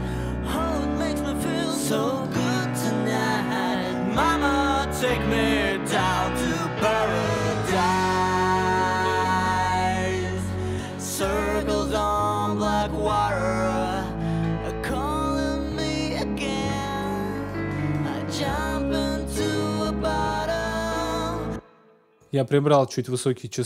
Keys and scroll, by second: 21.2 space.